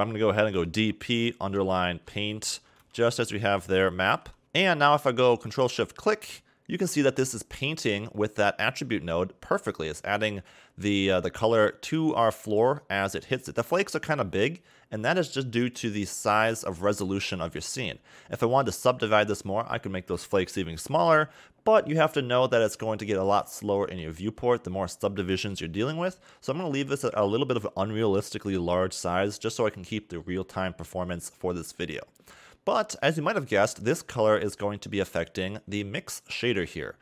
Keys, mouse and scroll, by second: 4.4-5.4 scroll down 2, 5.4 ctrl+shift+click, 8.1 click, 10.9 middle click, 12.4 middle click, 15.4 click, 16.2 Tab, 17.3 a, 17.5 a, 17.9 scroll up 1, 25.0 Tab, 26.3-29.3 scroll down 1, 31.9 scroll down 3, 32.0 middle click, 33.2 click, 34.2 click.